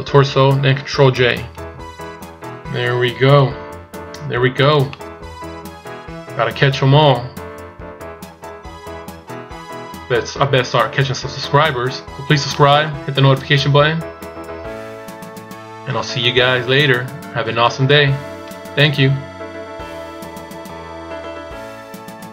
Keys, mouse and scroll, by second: 2.6 ctrl+scroll down 2, 3.1 ctrl+scroll down 3, 4.0-4.3 scroll up 1, 4.0 a, 4.6 middle click, 11.8-13.0 scroll down 2, 12.1 middle click.